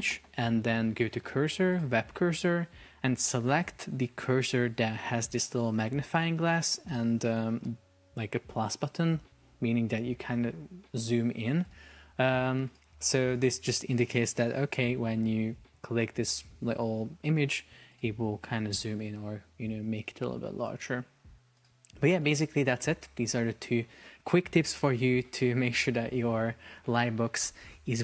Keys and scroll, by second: 14.3 super+p.